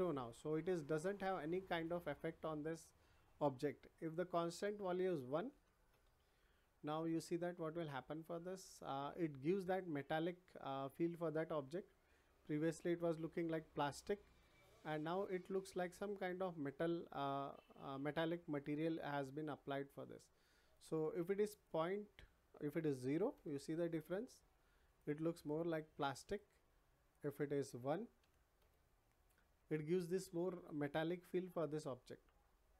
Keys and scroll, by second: 5.5 1, 5.9 Return, 22.9 0, 23.3 Return, 28.2 1, 28.5 Return.